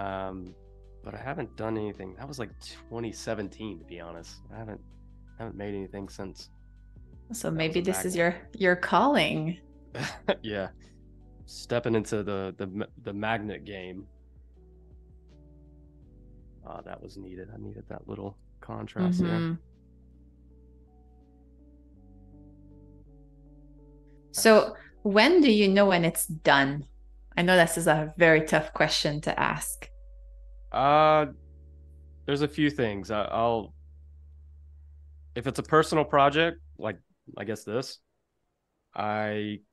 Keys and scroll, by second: 1.9 shift+super+[, 5.3 i, 7.2 Right, 8.1 Down, 9.0 Left, 10.2 shift+super+[, 11.2 Right, 12.7 v, 15.3 super+-, 16.1 space, 17.0 super+=, 18.0 space, 18.5 a, 19.9 Right, 20.6 Left, 23.8 super+-, 24.5 space, 27.2 z, 28.1 a, 35.1 super+c, 35.6 BackSpace, 36.8 v.